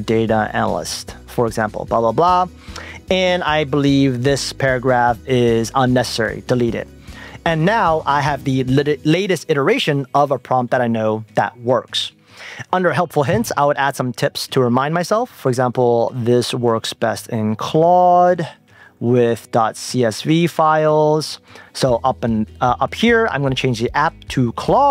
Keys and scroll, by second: 2.3 Return, 5.3 shift+Up, 5.7 shift+super+Left.